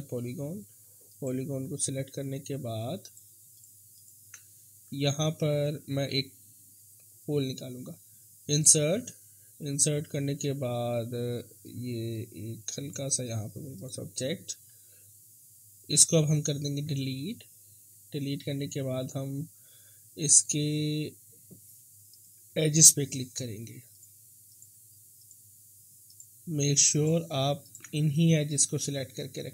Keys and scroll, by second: 17.1 Delete.